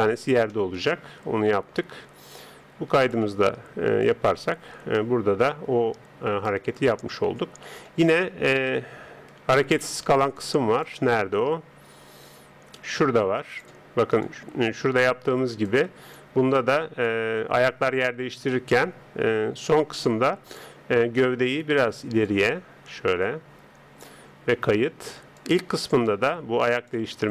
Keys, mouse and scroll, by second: 0.4 scroll up 1, 0.5-2.2 middle drag, 3.0-5.7 drag, 8.6 KP_3, 9.3-10.4 middle drag, 10.4-13.1 drag, 14.3 click, 21.5 right click, 22.3 click, 25.4-27.3 drag.